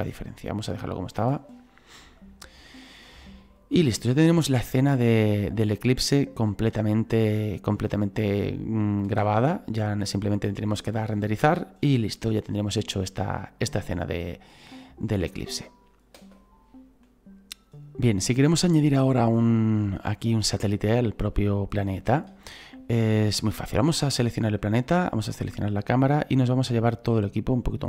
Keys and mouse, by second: 1.1 click, 2.9 click, 5.7 click, 9.2 space, 16.2 space, 22.0 shift+middle click, 23.4 right click, 25.0 shift+right click, 26.7 click.